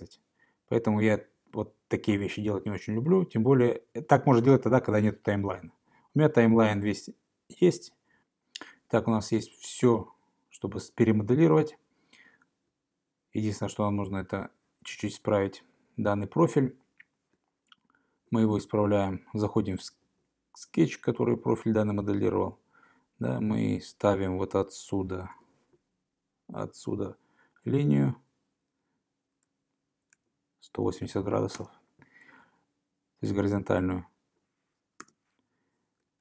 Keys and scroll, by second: 3.0 super+z, 25.4 l, 30.2 Tab, 31.6 Return, 35.1 Return.